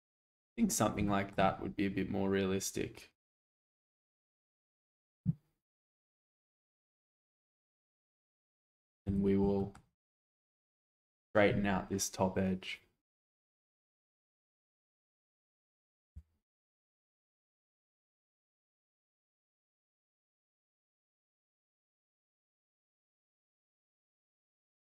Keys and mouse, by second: 0.2 shift+middle click, 1.1 shift+middle click, 1.5-4.6 middle drag, 6.3 shift+middle drag, 9.0 Tab, 9.6 shift+middle click, 10.0 alt+z, 10.6 click, 14.2 s, 14.6 x, 14.9 z, 16.1 0, 17.5 g, 17.7 z, 20.7 shift+click, 21.0 Tab, 21.5-22.0 middle drag, 22.7 alt+z, 23.2 shift+middle click, 24.2-24.7 shift+middle drag.